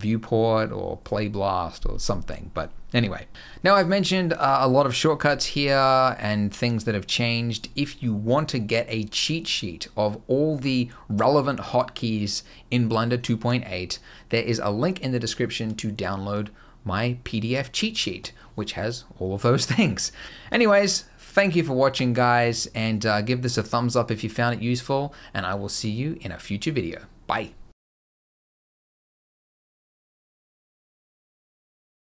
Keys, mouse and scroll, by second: 3.3 scroll down 1.